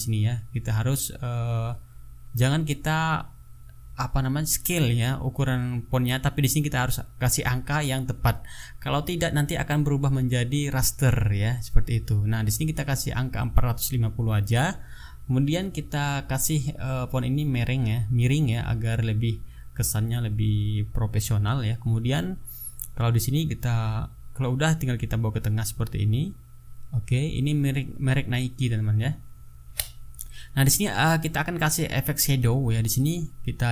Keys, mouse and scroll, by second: 0.2 click, 2.0 click, 3.4 click, 4.6 click, 6.6 click, 8.5 KP_4, 10.2 KP_5, 10.4 KP_0, 11.1 Return, 17.8 click, 20.3 click, 25.0-27.1 drag, 27.5 click, 29.2-29.8 ctrl+scroll up 4, 30.9-31.4 ctrl+scroll down 2, 32.1 ctrl+scroll up 2.